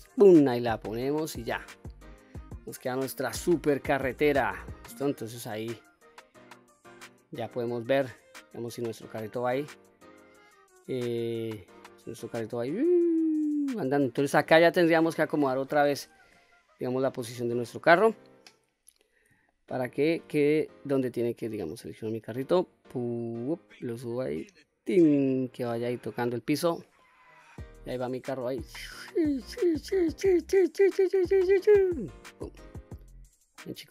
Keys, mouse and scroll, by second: 0.5-2.1 middle drag, 2.1 middle click, 3.2 Tab, 3.6-4.1 scroll down 2, 4.1-5.5 middle drag, 5.9 scroll up 1, 8.9 click, 11.8-12.4 scroll up 2, 12.4-14.2 middle drag, 14.6-15.1 middle drag, 15.9 KP_3, 16.5-16.8 scroll up 2, 19.2-19.6 shift+middle drag, 19.9-20.7 scroll up 2, 20.7 click, 22.4-25.8 drag, 26.4-26.7 scroll down 1, 26.7-27.6 middle drag, 27.6-28.6 scroll down 4, 28.6-31.5 drag, 32.2 ctrl+z, 32.6-33.3 middle drag, 33.6-33.9 middle drag.